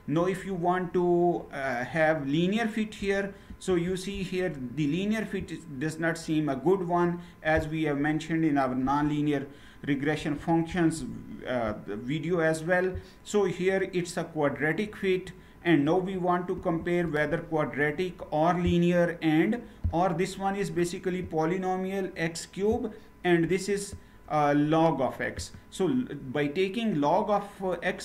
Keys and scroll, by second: 3.1 ctrl+Return, 9.9 ctrl+Return, 16.3 ctrl+Return.